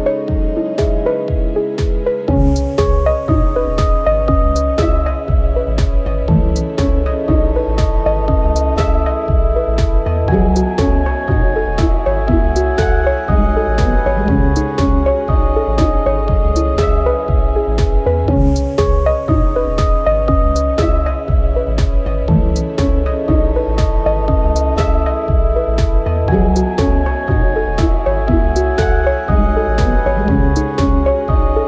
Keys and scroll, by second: 7.5 Escape, 7.6 alt+s, 9.5 alt+s, 19.2 alt+z, 21.5 ctrl+z, 26.9 Tab.